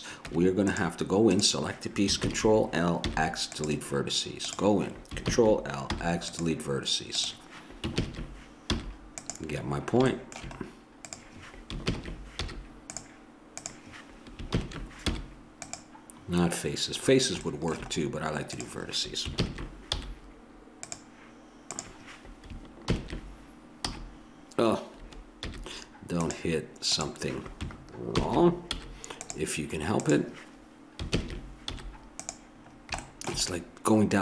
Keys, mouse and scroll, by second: 0.3 Tab, 2.2 ctrl+l, 3.1 x, 5.2 ctrl+l, 6.0 x, 7.9 ctrl+l, 8.7 x, 11.0 click, 11.0 right click, 11.6 click, 11.9 ctrl+l, 12.5 x, 14.5 ctrl+l, 15.1 x, 17.1 middle click, 18.5 click, 19.4 ctrl+l, 20.0 x, 22.9 ctrl+l, 23.8 c, 25.5 x, 27.0 right click, 28.2 ctrl+l, 28.8 x, 31.1 ctrl+l, 31.7 x.